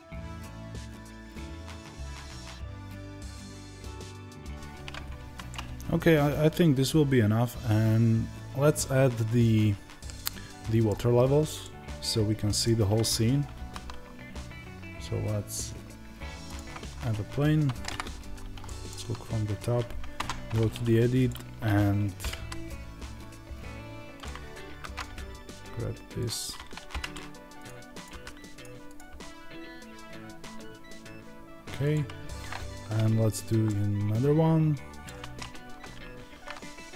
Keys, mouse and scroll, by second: 0.0 click, 0.3 ctrl+b, 1.5 click, 3.7-21.1 middle drag, 5.1 Tab, 13.4 shift+a, 20.0 Tab, 21.1-27.5 drag, 28.0 g, 29.0 g, 31.8 click, 32.5 Tab, 33.5-36.9 middle drag, 36.2 shift+a.